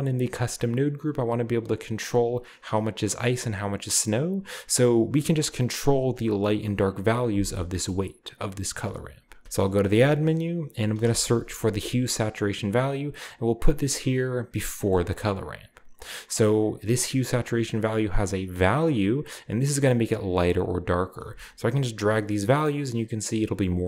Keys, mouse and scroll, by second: 3.4-4.2 middle drag, 5.4-6.1 drag, 5.9 right click, 6.1-7.8 middle drag, 7.9-8.5 middle drag, 8.5 click, 9.4 shift+a, 9.8 shift+click, 11.0 typing, 12.6-13.6 drag, 14.5-18.1 drag, 16.8-18.1 scroll up 1, 19.1-21.0 drag, 21.0 middle click, 21.3-23.8 shift+drag, 21.3-23.8 shift+right drag.